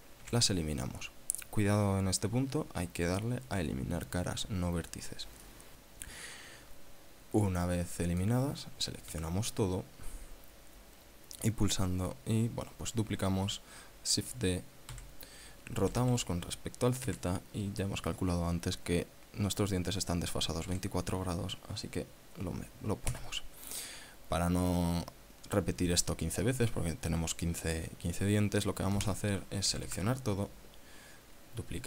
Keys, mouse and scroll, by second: 0.8 x, 5.5 click, 6.0-9.0 middle drag, 9.7 a, 15.5 shift+d, 16.5 r, 17.7 z, 21.2 KP_2, 23.7 KP_Enter, 30.3 a.